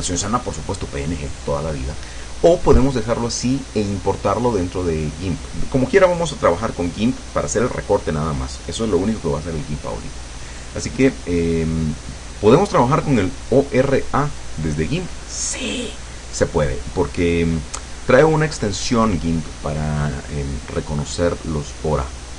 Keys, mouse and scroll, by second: 21.6 click.